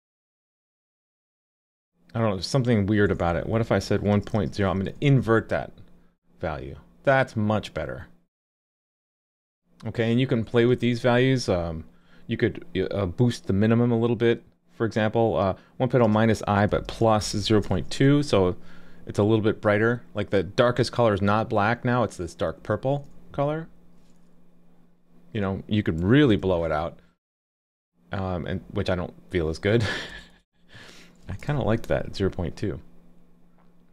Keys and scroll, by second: 5.0 super+s, 17.7 super+s, 26.4 super+s, 31.5 super+s.